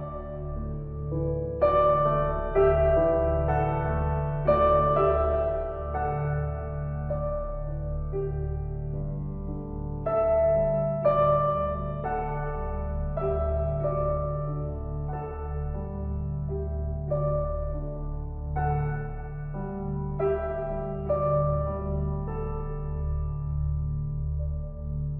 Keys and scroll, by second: 4.6 Down.